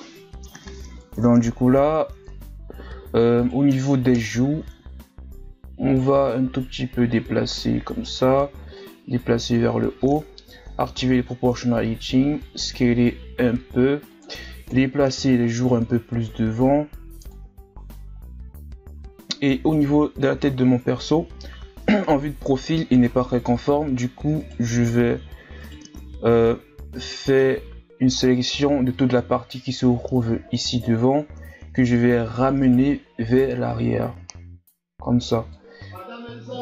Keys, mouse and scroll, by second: 0.0-0.6 ctrl+scroll down 3, 0.6-0.9 scroll up 2, 0.9 Tab, 1.4-2.3 ctrl+scroll down 7, 2.3 Tab, 2.6 scroll up 2, 3.4 right click, 4.1 ctrl+KP_Add, 5.1-6.2 scroll down 1, 6.2-10.4 drag, 10.4 o, 11.5 s, 14.7 KP_3, 15.5-16.6 ctrl+scroll down 4, 16.6-17.8 drag, 17.8-19.7 scroll down 1, 19.7 shift+scroll up 2, 20.5-23.0 ctrl+scroll down 1, 23.1 z, 24.4 right click, 24.7 n, 25.6 right click, 26.8 n, 27.3 c, 33.4-35.9 drag, 35.9 r.